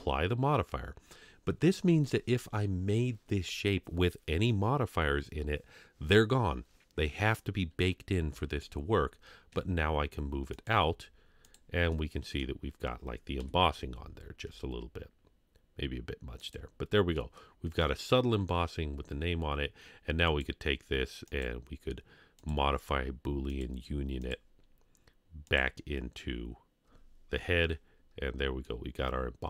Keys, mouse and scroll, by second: 0.3 ctrl+a, 8.3 KP_3, 9.5 g, 10.7 z, 11.9-12.4 middle drag, 13.4 KP_3, 14.0 scroll up 2, 14.4 g, 16.8 scroll down 1, 17.2-17.8 middle drag, 18.8-19.5 scroll down 1, 20.3 click, 22.7 click, 23.5 click, 24.2 click, 28.1 scroll up 2, 28.6-29.4 middle drag.